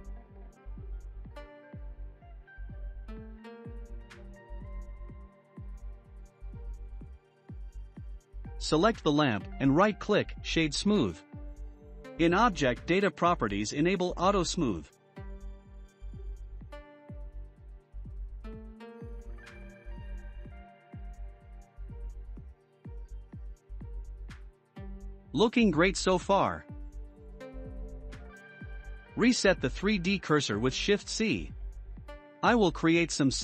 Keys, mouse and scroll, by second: 1.4-2.0 middle drag, 2.0 scroll down 2, 2.4-3.2 shift+middle drag, 3.2 click, 3.9-4.5 middle drag, 5.1-6.0 middle drag, 6.0-6.3 scroll up 5, 6.4-6.9 middle drag, 6.9 scroll up 4, 7.5 click, 8.0-11.1 right drag, 11.1 click, 12.2-14.0 drag, 15.6 click, 17.1-18.2 scroll down 2, 18.6-19.5 middle drag, 19.5-20.1 scroll down 4, 20.1-21.5 middle drag, 21.5-21.8 scroll down 2, 21.9-25.8 shift+middle drag, 30.8 shift+c, 32.1-32.8 scroll up 7, 32.8-33.4 middle drag.